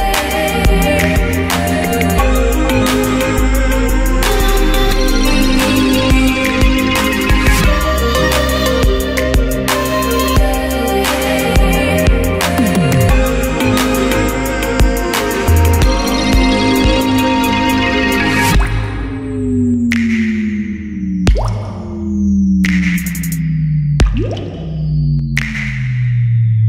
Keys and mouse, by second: 0.7 g, 1.1 click, 1.2 Tab, 4.2 z, 4.6 click, 5.0 h, 9.4 a, 10.2 alt+h, 10.6 m, 14.9 a, 16.0 alt+g, 19.1 a, 19.2 a, 19.9 middle click, 21.0 middle click, 21.2 alt+g, 21.7 z, 23.0 n, 24.1-25.2 middle drag.